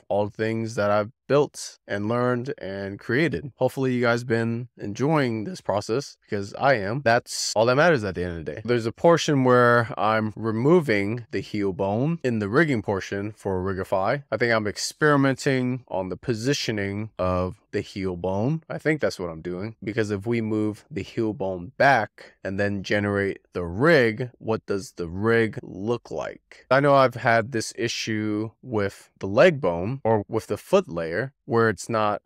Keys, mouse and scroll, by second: 0.0 middle click, 0.4-0.7 scroll up 4, 0.7 middle click, 2.6-3.7 shift+middle drag, 4.1-4.4 scroll up 3, 4.4-5.1 middle drag, 6.2-7.3 shift+middle drag, 7.7-8.0 scroll up 3, 8.0-8.5 middle drag, 8.5 click, 9.5-11.5 drag, 19.7 click, 20.0 click, 20.6 click, 20.7 click, 20.9 click, 21.6 click, 21.8 scroll down 1, 22.0-22.5 scroll up 5, 22.1 shift+middle click, 22.5 click, 22.7 click, 22.9 click, 23.1 click, 23.3 click, 23.7 scroll up 4, 24.0 scroll down 4, 24.2 middle click, 24.9 click, 25.1 shift+middle click, 25.5 a, 25.7 click, 25.8-26.3 scroll down 29, 26.3-27.8 drag, 28.4 click, 29.3 click, 30.3 scroll down 1, 30.5-31.1 middle drag, 31.1-31.4 scroll down 2, 31.4-32.2 middle drag.